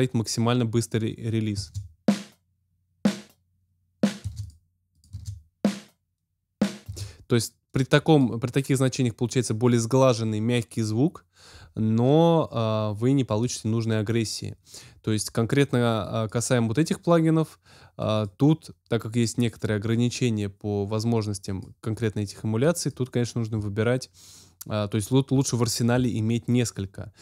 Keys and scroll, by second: 1.5 space, 4.2 space, 6.8 space.